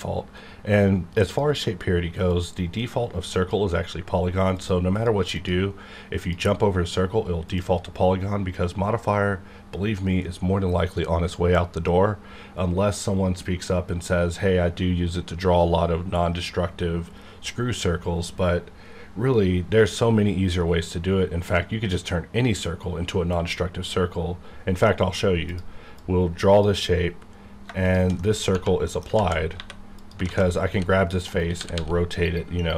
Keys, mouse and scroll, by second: 2.2 click, 24.8 middle click, 25.4 click, 25.5-27.8 drag, 28.2 middle click, 28.8 middle click, 29.1 alt+z, 29.5 3, 29.9 click, 30.1 click, 30.2 alt+z, 30.7 r, 31.3 right click, 31.5 r, 31.7 r.